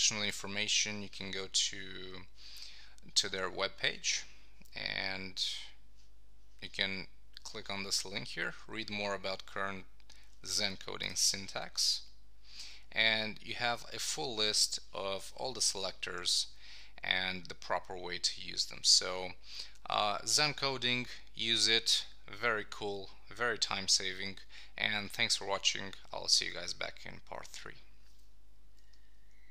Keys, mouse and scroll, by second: 0.7 click.